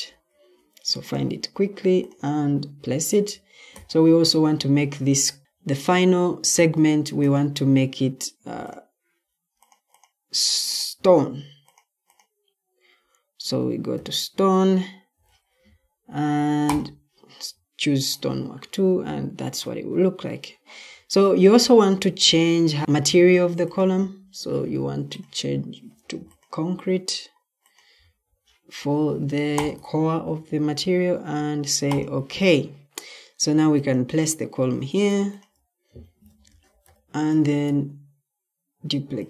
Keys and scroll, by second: 0.0-0.2 typing, 13.9-15.1 typing, 22.1-22.8 c, 23.9 c, 27.8 c, 36.4 ctrl+d.